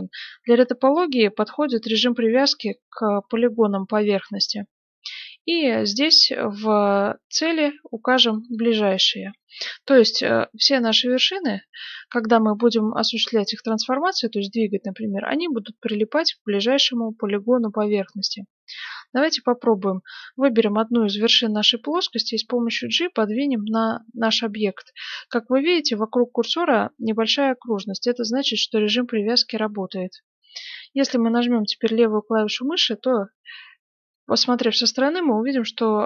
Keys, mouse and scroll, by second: 5.5-9.4 drag, 9.4-11.3 middle drag, 12.9-14.9 middle drag, 16.3-19.9 middle drag, 20.1 right click, 21.6 g, 33.2-36.0 middle drag.